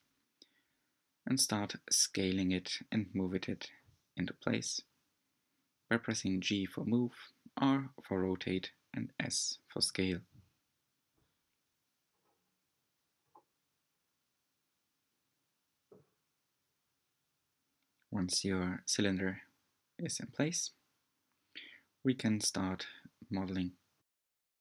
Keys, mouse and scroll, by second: 2.9 s, 7.7 scroll up 3, 9.2 s, 12.9 g, 16.1-17.3 shift+middle drag, 17.3-18.8 scroll up 7, 18.8-20.2 shift+middle drag, 20.2 r, 22.0 g, 22.9 s.